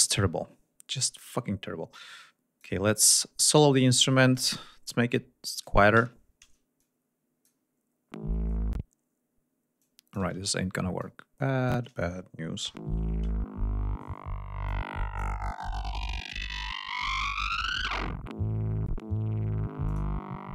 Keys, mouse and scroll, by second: 0.2 scroll up 2, 1.8 click, 3.0-3.3 scroll up 2, 4.2 click, 4.8 click, 5.9 l, 6.7 click, 9.7 click, 10.2 space, 10.9 click, 12.5 l, 14.6 click, 19.8 click.